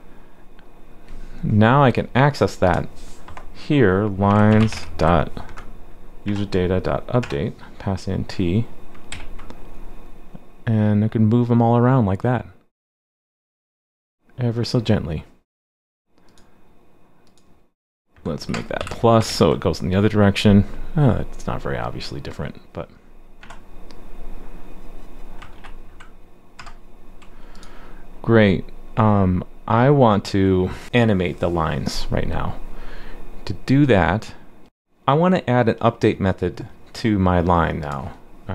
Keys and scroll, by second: 9.1 super+s, 19.2 super+s, 25.5 super+s, 25.5 super+z.